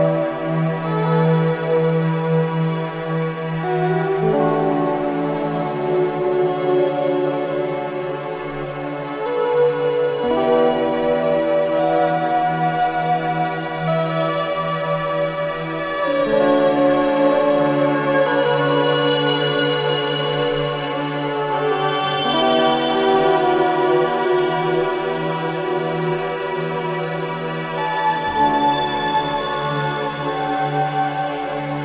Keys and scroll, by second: 8.2 space, 9.0 c, 9.4 Escape, 16.7 ctrl+r, 30.6 space.